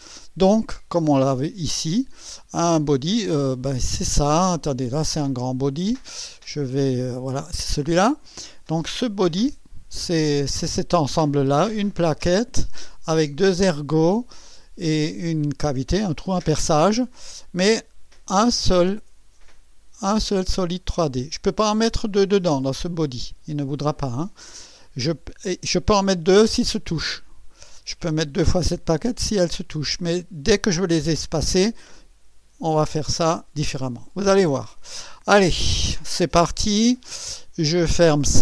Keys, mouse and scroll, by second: 1.1 click, 3.8 click, 5.7 click, 7.5 click, 16.1-17.7 drag, 34.7 click.